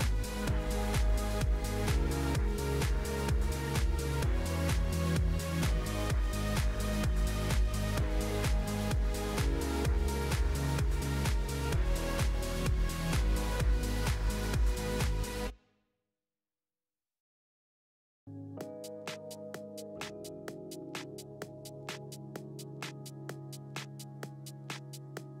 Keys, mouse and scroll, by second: 1.3-1.8 scroll down 4, 2.4-3.4 drag, 3.4-3.8 scroll down 1, 4.2 scroll up 1, 5.3 click, 5.7-6.3 scroll down 2, 6.3 g, 8.1-10.5 drag, 10.5 KP_0, 12.3 click, 13.8 click, 14.9 click, 15.2-16.2 scroll down 15, 16.2 drag, 16.5-17.4 scroll down 7, 17.4-22.5 drag, 24.5-25.4 drag.